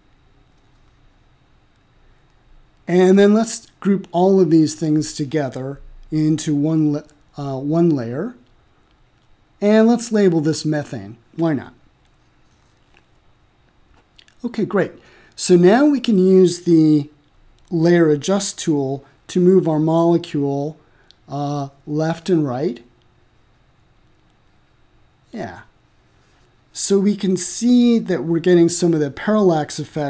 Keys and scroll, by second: 9.6-11.1 typing, 11.3 Return.